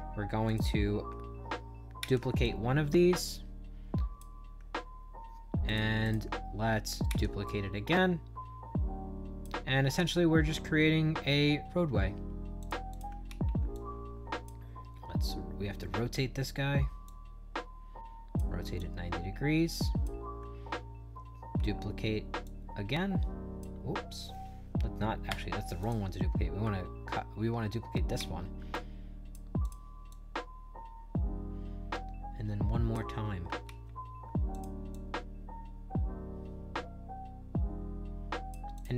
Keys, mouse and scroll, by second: 0.4 click, 1.9 ctrl+d, 2.3-4.1 drag, 5.6 click, 5.9 click, 7.0 ctrl+d, 7.4-9.3 drag, 9.9 ctrl+d, 12.5 click, 12.8 click, 13.2 ctrl+d, 13.6 click, 17.0-18.3 shift+drag, 18.7-19.9 drag, 21.4 ctrl+d, 22.3-23.5 drag, 25.7 click, 28.1 ctrl+d, 28.6 click, 29.5 click, 30.0-32.8 drag, 33.5 ctrl+d, 34.4 click, 34.8-38.4 drag, 38.6 click.